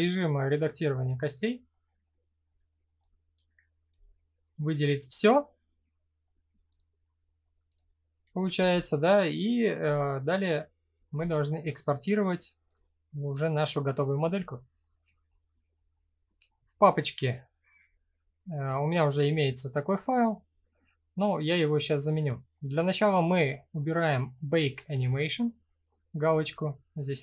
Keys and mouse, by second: 0.8 click, 1.3 middle click, 2.6 click, 6.3 click, 8.1 a, 9.5-12.4 drag.